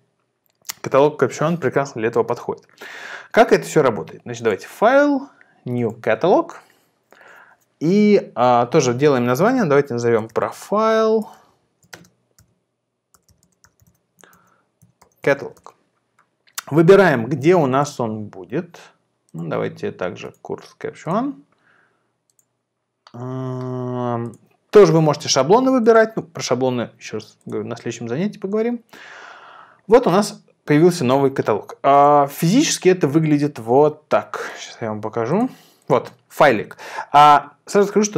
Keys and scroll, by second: 9.4-16.0 typing, 33.7 super+w.